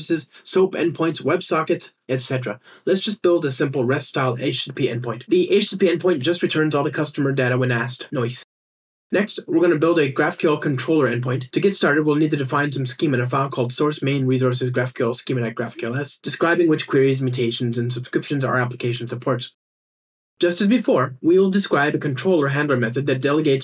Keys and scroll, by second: 0.9 alt+shift+Up, 1.9 ctrl+alt+shift+r, 10.0 super+`, 10.2 super+1, 11.3 Up, 11.4 Right, 11.5 Down, 14.6 super+n, 16.7 alt+BackSpace, 19.2 alt+Return.